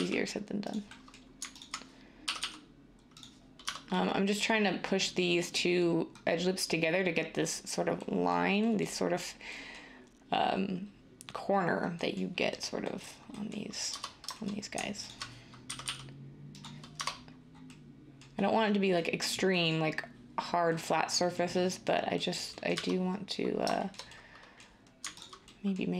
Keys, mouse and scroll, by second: 2.2 g, 2.3 g, 3.7 Tab, 13.9 Tab, 15.6 g, 15.8 g, 16.9 Tab, 22.7 Tab.